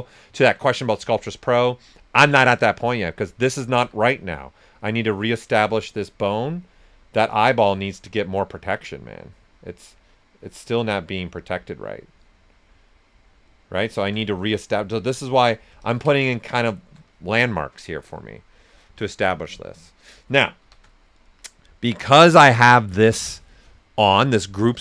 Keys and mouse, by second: 0.3 alt+right click, 0.9 s, 1.0-3.7 drag, 3.7 typing, 3.8 click, 12.8 alt+click, 16.5 ctrl+right click, 20.6 shift+f.